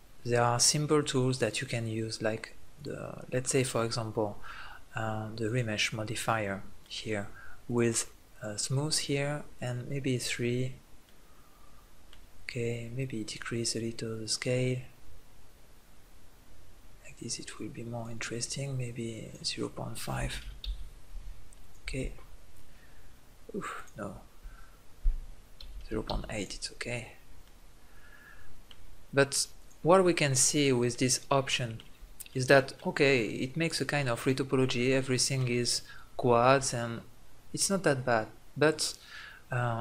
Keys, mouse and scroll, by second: 1.3-4.7 drag, 4.7-6.0 middle drag, 7.6-11.7 drag, 14.6-19.2 drag, 21.1-23.8 drag, 25.6-27.4 drag, 27.5 middle click, 29.6-31.5 drag, 38.5 middle click.